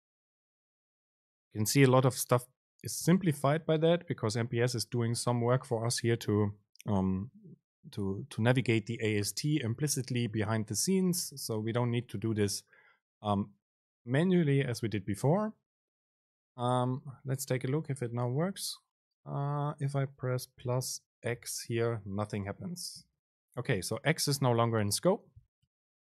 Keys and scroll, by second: 3.2 ctrl+shift+super+F9, 18.3 Up, 18.6 End, 22.2 super+space, 25.8 BackSpace.